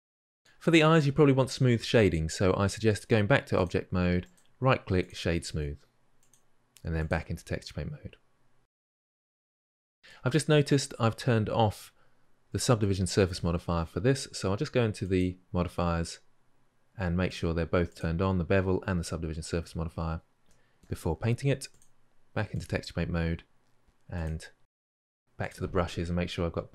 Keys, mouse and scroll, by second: 0.1-3.5 middle drag, 3.5-4.9 drag, 4.9-6.9 right drag, 6.9-8.3 drag, 8.3-8.7 scroll down 3, 8.7-9.4 middle drag, 9.4-9.7 scroll up 3, 9.7 alt+click, 9.8-17.1 middle drag, 17.1 click, 17.7 click, 20.3-22.4 middle drag, 22.4-24.8 drag, 24.8-26.7 middle drag.